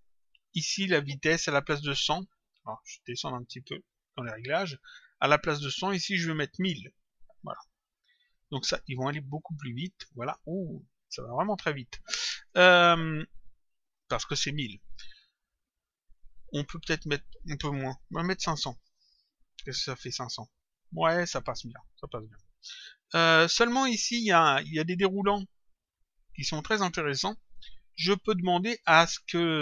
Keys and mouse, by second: 1.4 click, 3.1 click, 5.0 click, 7.8 click, 9.1 click, 11.4 click, 17.0 click, 19.0 click, 21.3 click, 24.3 click.